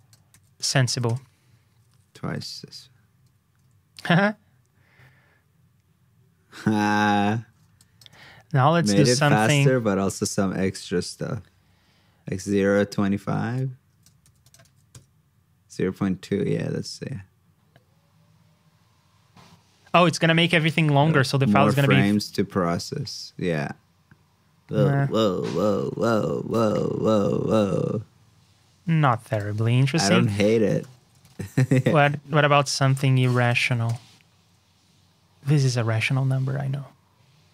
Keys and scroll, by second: 0.8 super+v, 14.2 super+c, 14.6 super+v, 33.2 super+c, 33.5 super+v.